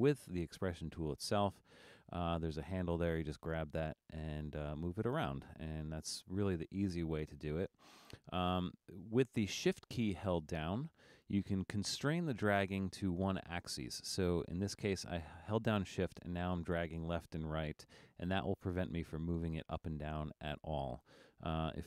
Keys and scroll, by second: 5.7 super+z.